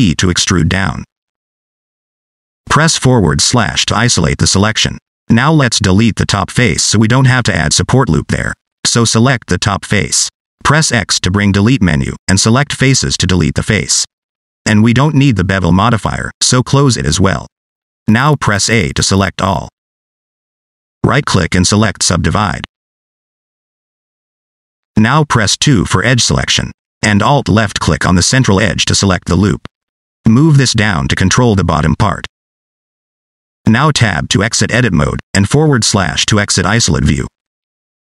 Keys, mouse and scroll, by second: 0.7 e, 2.4 middle click, 2.8 scroll up 2, 3.1 middle click, 3.9 /, 4.9-5.2 scroll down 4, 5.2 middle click, 5.8 shift+middle click, 8.5 click, 10.3 x, 17.1 click, 20.3 a, 21.4 right click, 24.4 middle click, 26.1 middle click, 27.6 2, 28.6 alt+click, 30.5 click, 33.5 Tab, 35.4 /, 36.8-38.1 scroll down 1.